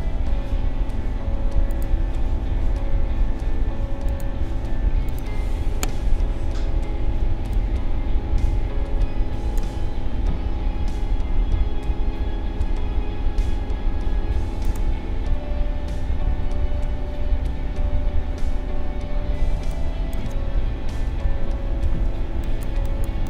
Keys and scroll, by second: 7.2 space, 19.5 space, 20.9 ctrl+=.